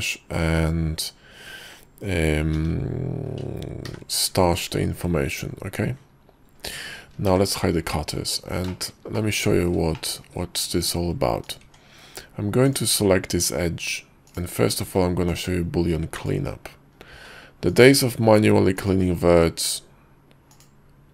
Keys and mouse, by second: 4.0 y, 7.4 shift+2, 8.1 click, 8.8 shift+drag, 9.3-9.8 drag, 10.0 shift+click, 11.7 Tab, 12.8 click, 14.4 ctrl+click, 15.0 ctrl+z, 15.9 ctrl+z, 16.3 ctrl+click, 17.2 ctrl+z, 17.8 ctrl+click, 18.4 ctrl+z, 19.7-21.1 ctrl+drag.